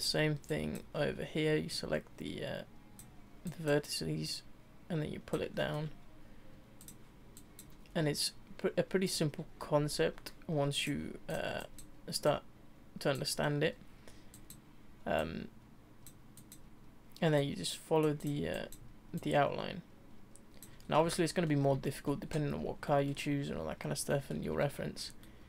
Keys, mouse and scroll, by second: 0.5 click, 1.7 click, 3.5 click, 4.3-5.5 drag, 5.5-6.8 shift+middle drag, 6.8 click, 7.3 click, 7.9 e, 10.8 click, 11.3 click, 11.6 click, 12.2 click, 14.3 click, 15.2 click, 16.4 click, 17.3 click, 18.2 click, 19.2 click, 20.8-21.1 scroll down 3, 21.1 shift+middle click, 22.4-22.9 scroll down 1, 22.9 shift+middle click, 24.1 shift+middle click, 25.2 shift+middle click.